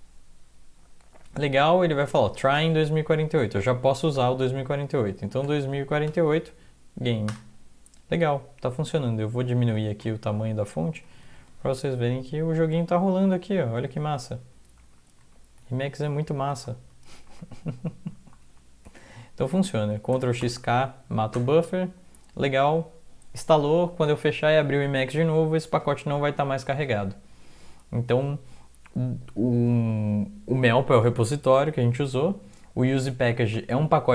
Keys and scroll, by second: 4.2 alt+x, 5.0-6.1 typing, 6.2 Tab, 7.3 Return, 9.7 ctrl+x, 10.0 ctrl+-, 10.3 ctrl+-, 11.0 ctrl+-, 12.1 Down, 12.6 Right, 13.0 Down, 13.6 Right, 14.0 Down, 14.4 Down, 14.8 Right, 15.2 Right, 15.6 typing, 16.0 Down, 16.5 Right, 16.9 Down, 17.3 Right, 18.0 Left, 18.1 Right, 18.4 Down, 20.1-20.9 typing, 21.3 Return.